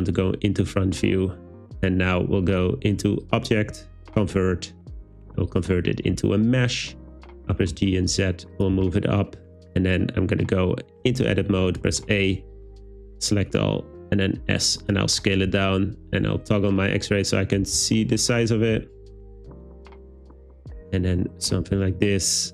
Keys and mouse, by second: 3.3-5.7 drag, 7.6 g, 7.7 z, 8.6 click, 8.8 w, 11.1 Tab, 11.9 a, 12.7 s, 14.8 click, 15.5 z, 17.7 s, 20.6 click, 21.1 Tab, 21.7 shift+s.